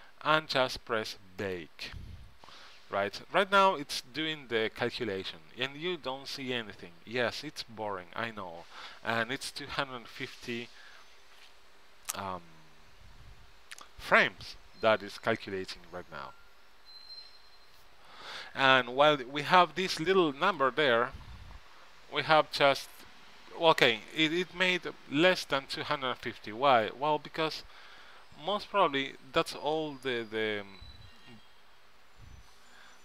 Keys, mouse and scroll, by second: 1.6-19.2 drag.